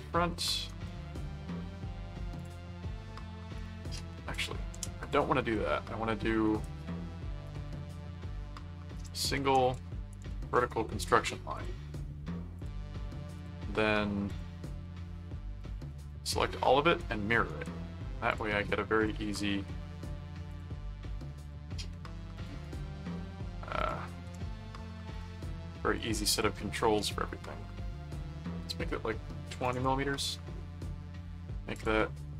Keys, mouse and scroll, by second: 0.7 right click, 2.3 click, 3.6 click, 4.3 click, 5.0 click, 5.3 right click, 6.4 right click, 7.4 click, 9.0 click, 9.6 alt+click, 10.0 alt+v, 10.3 alt+c, 10.4 click, 10.7 right click, 11.5 click, 12.6 click, 13.4 click, 14.2 click, 15.6 click, 16.6 right click, 17.4 right click, 18.3 click, 19.0 click, 19.4 right click, 20.5 click, 21.4 click, 22.4 click, 22.6 right click, 23.8 click, 25.1 click, 25.9 click, 31.7 click.